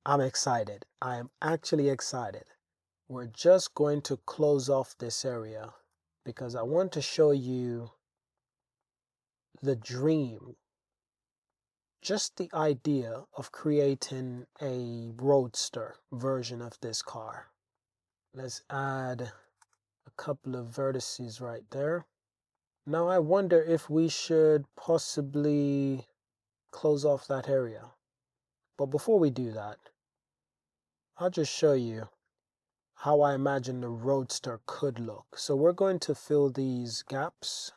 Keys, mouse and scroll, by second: 1.8-2.3 shift+drag, 2.7 e, 2.7 x, 3.3 click, 3.5 Tab, 4.9 click, 5.3 Tab, 5.9 g, 6.0 Tab, 6.0 x, 8.4 shift+middle drag, 8.8-9.6 middle drag, 9.8-10.9 shift+middle drag, 11.5-12.2 middle drag, 13.3 middle click, 13.9 middle click, 14.6 shift+drag, 17.8 drag, 18.0 super+Tab, 18.1 super+r, 18.3 click, 18.9 super+r, 19.2 click, 19.7 Tab, 20.0-20.8 drag, 21.5 shift+drag, 22.6 shift+drag, 23.3 Tab, 25.0 super+r, 27.3 Tab, 27.9 Tab, 28.6 Tab, 31.4 click, 32.1 click, 33.0 shift+click, 33.7 f, 34.0 click, 34.5 click, 35.5 f, 36.1 f, 37.1 shift+click, 37.6 super+z.